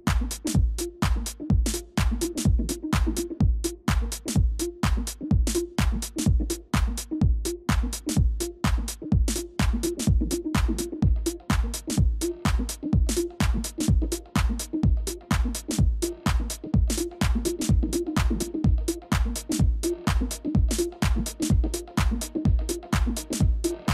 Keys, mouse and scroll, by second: 2.6 space, 3.5 right click, 8.5 shift+click, 17.1 ctrl+space, 17.9 space, 21.9 ctrl+-, 22.1 ctrl+-, 22.2 ctrl+-, 22.7 ctrl+-, 22.8-23.9 ctrl+-.